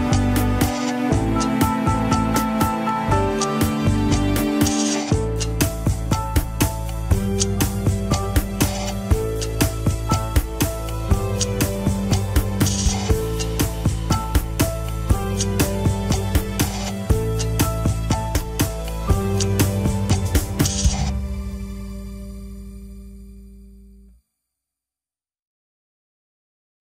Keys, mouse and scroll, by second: 2.0-2.9 shift+middle drag, 2.9 click, 3.2-3.7 scroll up 4, 3.6 shift+middle click, 3.9 alt+z, 4.1 middle click, 4.6 alt+z, 4.7-5.9 middle drag, 5.9 KP_1, 6.4 r, 7.2 scroll down 5, 7.5-8.3 scroll up 9, 7.9 shift+middle click, 10.3 scroll down 2, 11.4-13.2 shift+middle drag, 13.2 scroll down 2, 13.4 KP_3, 14.0 click, 14.5 r, 17.4 ctrl+Tab, 18.2 click, 18.4 click, 18.6-19.2 scroll up 3, 18.9 shift+middle click, 19.2 Tab, 19.3 alt+z, 19.6 click, 19.9 scroll up 2, 20.2 g, 22.0-22.7 scroll down 4.